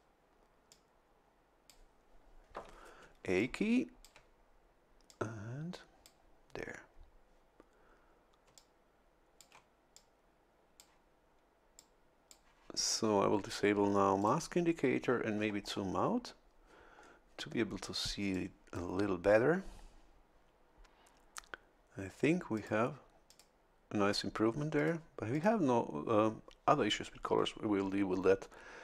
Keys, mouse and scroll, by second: 0.7-1.9 drag, 3.0 a, 3.4 click, 5.1-6.3 drag, 8.5 a, 8.6-9.6 drag, 10.0-11.0 drag, 11.8 click, 14.2 click, 15.3-15.9 scroll down 1, 16.2 scroll down 1, 17.0 scroll up 1, 17.7 scroll down 1, 18.3 click, 22.5 click, 23.3 click, 24.8 click, 25.3 click.